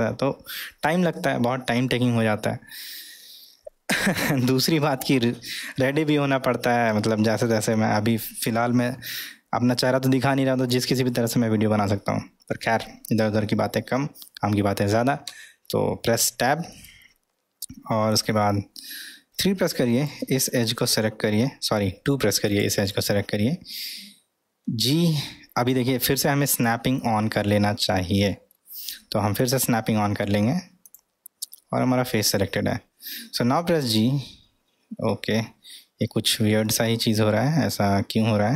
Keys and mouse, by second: 3.5-4.0 middle drag, 5.8-7.0 middle drag, 7.7 middle click, 10.2-10.6 middle drag, 11.1-12.6 middle drag, 15.3 Tab, 16.0-16.7 middle drag, 19.3 3, 19.9 click, 22.0 2, 22.5 click, 24.6 g, 29.4 click, 30.8-31.6 drag, 33.5 g, 37.4-38.5 middle drag.